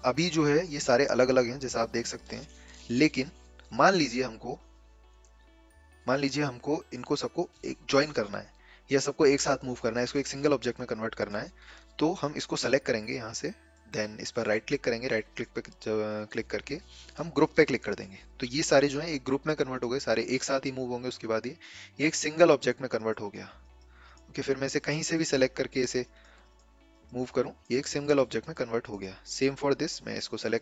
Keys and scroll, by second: 2.8 ctrl+z, 3.1 ctrl+z.